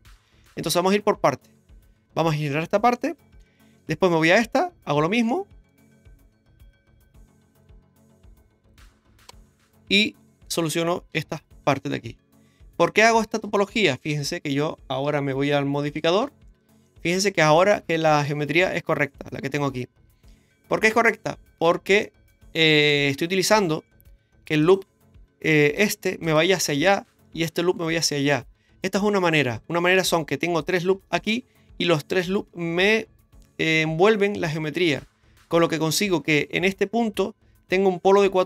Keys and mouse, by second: 0.4-1.5 middle drag, 3.4 shift+middle click, 5.3 shift+middle click, 6.6 k, 9.9 right click, 10.3 shift+right click, 11.1 x, 12.7 right click, 13.2 shift+right click, 13.9 x, 16.0 click, 16.2 Tab, 16.8 middle click, 20.9-21.6 drag, 21.6 Tab, 22.0 middle click, 24.6 right click, 25.8 shift+right click, 26.2 shift+right click, 27.4 shift+right click, 29.0 middle click, 31.2 shift+right click, 38.2 1.